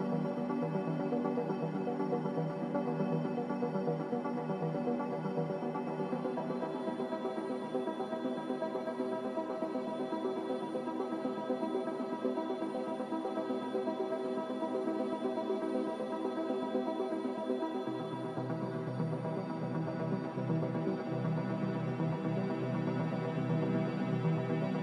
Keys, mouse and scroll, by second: 4.6 z, 6.3-7.2 typing, 10.6-11.4 typing, 18.0-18.8 typing.